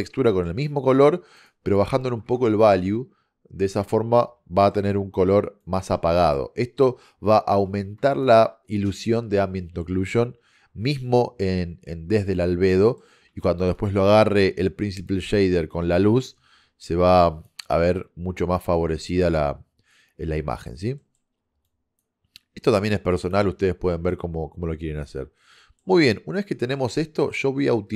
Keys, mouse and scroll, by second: 1.4 click, 4.5-5.7 middle drag, 5.7-7.4 drag, 8.3 click, 12.9 middle click, 13.7-15.1 drag, 17.5 click, 21.0 middle click, 21.7 click, 24.1 middle click, 24.3 click.